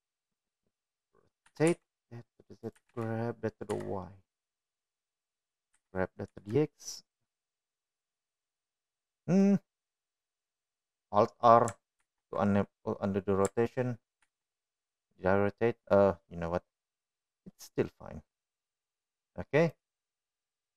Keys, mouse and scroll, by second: 0.3-1.2 middle drag, 3.1 r, 4.3 g, 7.3 g, 11.0-11.6 drag, 16.6-17.6 middle drag, 18.6 middle click, 20.6-20.7 drag.